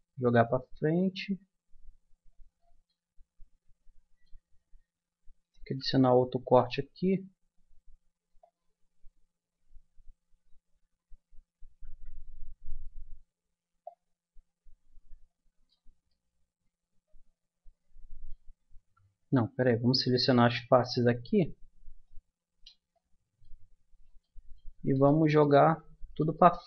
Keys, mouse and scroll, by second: 0.2 click, 2.8-4.0 middle drag, 5.6 ctrl+r, 6.5-10.1 drag, 10.1-12.2 middle drag, 11.6 ctrl+z, 16.1-17.6 middle drag, 19.2 ctrl+z, 20.8-23.1 drag, 26.0-26.6 middle drag.